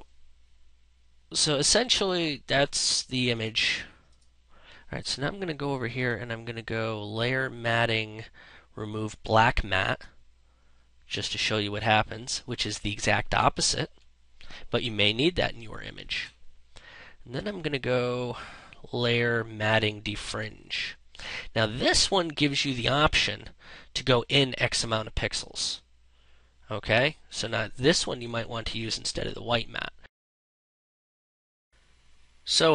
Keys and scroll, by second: 15.0 ctrl+z, 30.5 1, 30.9 0, 31.1 Return.